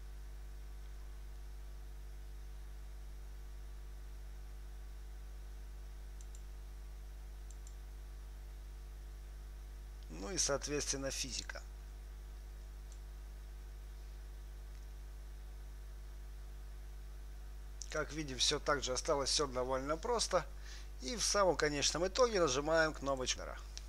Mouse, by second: 2.5-4.4 right drag, 5.9-9.6 drag, 5.9 right click, 11.8-18.4 drag, 23.5 click.